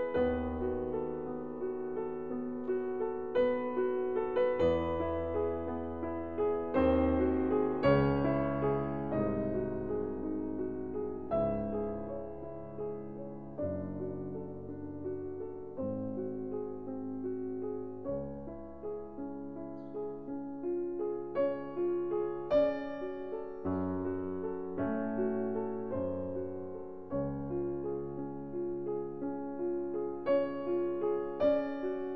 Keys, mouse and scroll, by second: 0.9-2.1 drag, 2.9 ctrl+scroll, 6.7-7.3 scroll, 7.3-7.7 scroll, 10.1 click, 12.3 click, 14.2 click, 16.1 click, 19.4-20.5 drag, 21.1-22.2 drag, 22.8-23.9 drag, 24.6 click, 25.5 click, 27.0-28.1 drag, 29.1 middle click, 29.1-30.0 scroll up 1, 30.4 click, 31.7 scroll.